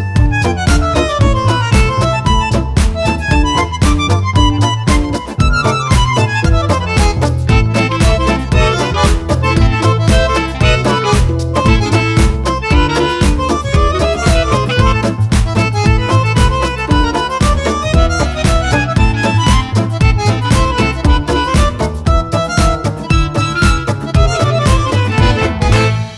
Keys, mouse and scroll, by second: 0.1 shift+click, 0.6 shift+F1, 1.5 Delete, 2.2 F2, 2.4 click, 3.4 Delete, 3.7 click, 5.8 click, 7.4 click, 9.2 click, 10.4 click, 12.0 shift+click, 12.5 shift+click, 13.5 shift+F1, 14.5 click, 16.2 ctrl+shift+g, 17.7 click, 19.2 shift+click, 20.7 shift+click, 21.6 click, 22.6 shift+click, 23.5 shift+click, 24.4 shift+click, 25.0 shift+click, 25.8 shift+click.